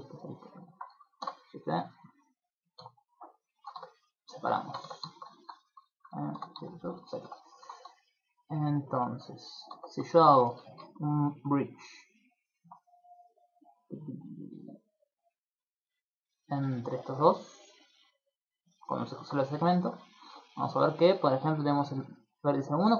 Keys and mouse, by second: 0.5 alt+shift+right click, 1.2 shift+d, 2.1 click, 2.7 p, 3.5 shift+middle click, 3.7 Tab, 4.1 right click, 4.3 shift+middle click, 4.6 ctrl+middle click, 4.8 Tab, 5.1 shift+middle click, 5.3 ctrl+middle click, 6.3 shift+d, 7.0 middle click, 7.3 ctrl+middle click, 7.4 ctrl+middle click, 8.1 click, 9.1 Tab, 9.7 Tab, 10.2 a, 10.5 a, 11.9 click, 13.6 click, 13.7 click, 14.0 click, 14.2 click, 14.4 click, 14.7 click, 15.1 click, 15.6 click, 16.5 middle click, 16.7 ctrl+middle click, 16.9 middle click, 17.9 click, 18.9 middle click, 19.2 ctrl+middle click, 19.5 shift+middle click.